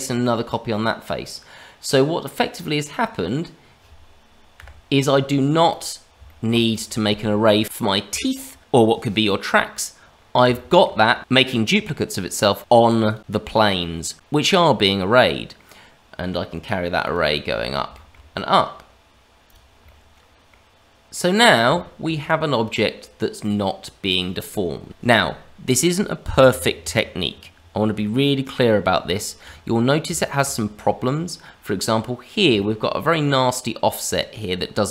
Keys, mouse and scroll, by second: 2.2 click, 2.7-4.6 scroll down 1, 4.6 KP_Divide, 5.2 scroll down 1, 5.6 click, 6.2 shift+middle click, 6.7 click, 10.1 scroll up 2, 10.5 shift+middle click, 12.6 click, 13.0 click, 13.5 click, 14.9 middle click, 17.0 click, 17.6 scroll down 2, 17.9 shift+middle click, 19.4 click, 19.8 middle click, 21.1 middle click, 21.7 shift+middle click, 22.1-22.6 scroll up 2, 22.6 middle click, 28.7 scroll up 1, 29.1 shift+middle click, 29.5-30.0 scroll up 1, 30.1 shift+middle click, 31.0 middle click, 32.5 shift+middle click, 34.7-34.9 scroll down 2.